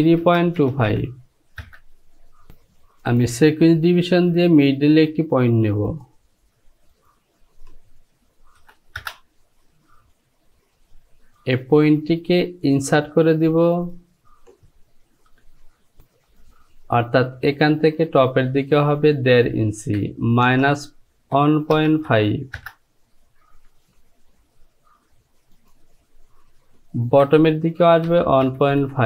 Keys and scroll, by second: 0.3 KP_Decimal, 0.7 KP_2, 0.9 KP_5, 1.7 Return, 8.7 KP_2, 9.0 Return, 19.8 Down, 20.5 KP_Subtract, 21.4 KP_1, 21.8 KP_Decimal, 22.1 KP_5, 22.6 Return, 27.1 Down, 28.1 KP_1, 28.5 KP_Decimal, 28.9 KP_5.